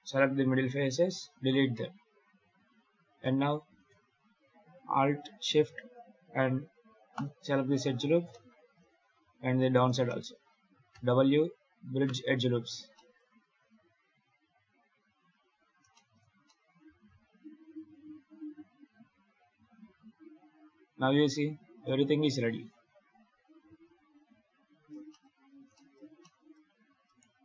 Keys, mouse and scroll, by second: 1.0 x, 2.0 2, 2.6 z, 3.1 middle click, 7.0 alt+shift+right click, 8.2 middle click, 9.5 alt+shift+right click, 9.9 middle click, 10.8 w, 12.6 scroll down 2, 12.8 middle click, 13.4 Tab, 14.3 KP_7, 14.8-15.1 scroll up 4, 15.1 scroll down 1, 15.4 alt+a, 15.8 shift+middle click, 16.3 middle click, 21.7 KP_7, 25.0 shift+middle click, 25.3 scroll up 4, 25.6 shift+middle click, 26.1 middle click, 26.9 right click.